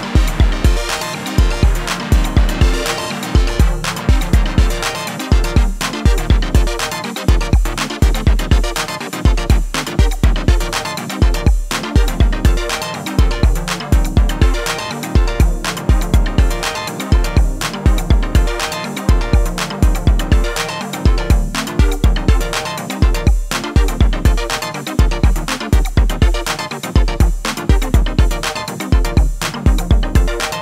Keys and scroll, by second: 18.1 t, 18.8 c.